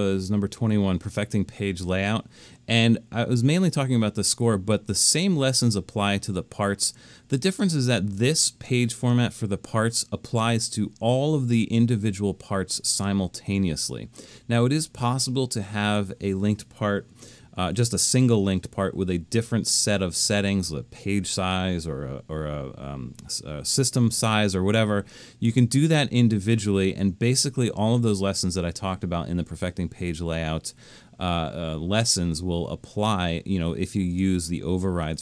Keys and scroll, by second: 17.8 alt+super+..